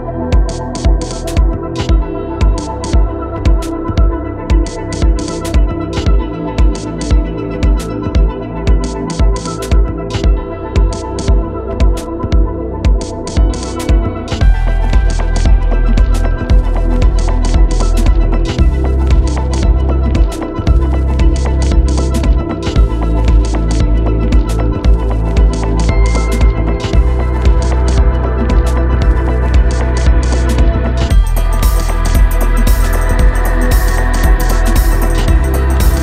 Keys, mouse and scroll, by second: 0.1 ctrl+click, 0.4 ctrl+space, 1.5-3.0 drag, 3.6 click, 4.3 ctrl+click, 4.7 ctrl+space, 6.7 click, 11.9 ctrl+i, 14.0 typing, 15.7 click, 17.1-17.9 typing, 18.2 click, 19.8 typing, 22.2 click, 23.4 ctrl+space, 23.5 ctrl+click, 23.8 ctrl+space, 25.8-36.0 drag.